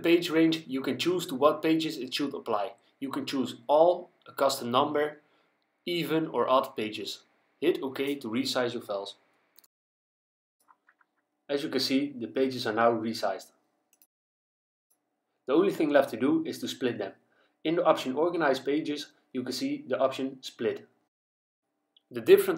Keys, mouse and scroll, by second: 0.9 click, 3.6 click, 4.6 click, 7.0 click, 13.9 click, 19.7 click.